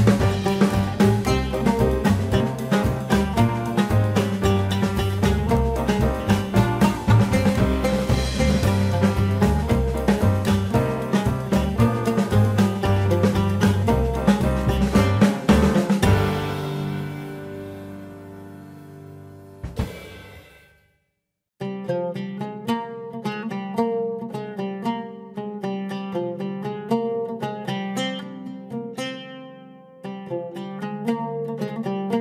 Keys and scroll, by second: 29.3 ctrl+shift+n, 29.8 Return.